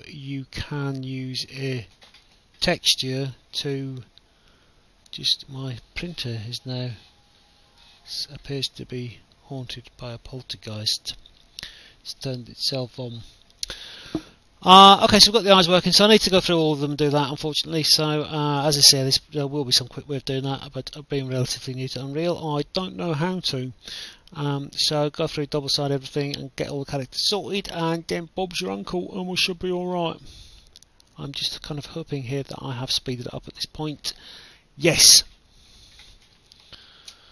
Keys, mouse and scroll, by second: 0.0 click, 1.9 click, 3.9 click, 6.1 click, 8.9 click, 9.4 right click, 10.1 d, 11.3 click, 12.1 right click, 12.7 click, 13.7 right click, 14.0 w, 14.7 a, 15.5 right click, 16.6 right click, 16.6 d, 17.1 s, 21.4 right click, 21.7 w, 22.2 a, 23.5 a, 24.1 d, 24.6 w, 26.0 click, 29.2 click, 30.6 click, 31.5 click, 33.8 alt+F9.